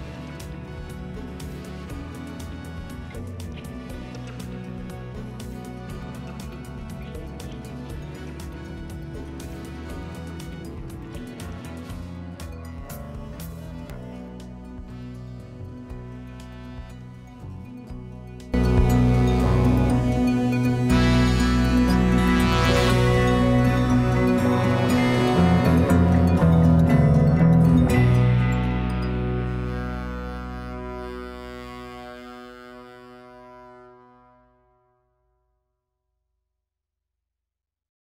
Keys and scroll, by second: 2.2 ctrl+1, 4.2 ctrl+-, 6.1 ctrl+-.